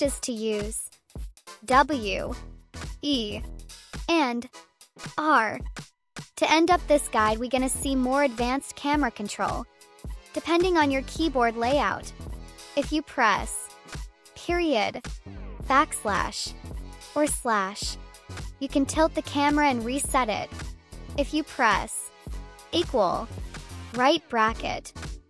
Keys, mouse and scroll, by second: 0.1 click, 0.9 z, 1.9 e, 3.0-6.0 typing, 6.8 click, 7.8 e, 8.4-9.5 drag, 10.9 click, 13.6 \, 15.1 ., 17.2 /, 18.8 \, 20.1 \, 20.6 /, 23.8 [.